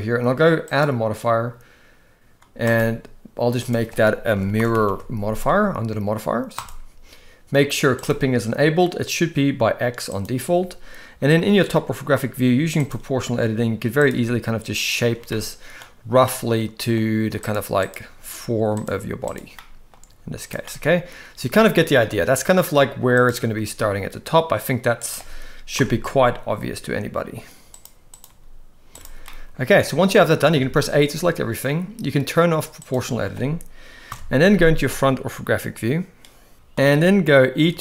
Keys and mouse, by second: 0.7 click, 2.8-6.7 drag, 4.8 r, 11.7 g, 14.1 g, 15.3 middle click, 16.3 middle click, 17.4 click, 18.0 g, 19.5 middle click, 20.0 g, 20.7 middle click, 21.6 a, 21.9 middle click, 23.1 click, 23.5 g, 25.8 KP_7, 26.4 g, 28.3 g, 29.3 middle click, 30.6 a, 32.8 click, 34.1 KP_1, 36.5 shift+middle click, 37.6 e.